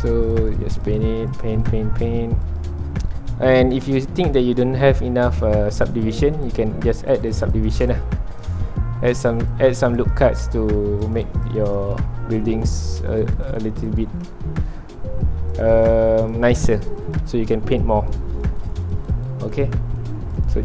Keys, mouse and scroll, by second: 1.9 scroll down 1, 2.3 click, 3.1 middle click, 4.0 ctrl+alt+click, 4.8 middle click, 5.4-5.9 scroll up 2, 5.9-8.8 drag, 8.8 middle click, 9.4-12.0 drag, 12.0 shift+middle click, 12.8-14.4 drag, 14.4-15.6 middle drag, 15.6-19.6 drag, 19.6 middle click, 20.5-20.6 drag.